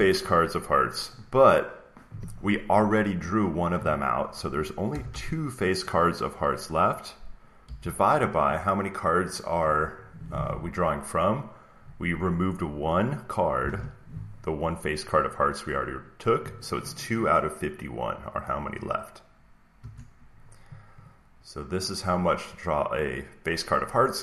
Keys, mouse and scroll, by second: 4.8 BackSpace, 5.0 BackSpace, 13.5 typing, 15.6 typing, 19.7 Return, 20.9-23.0 drag.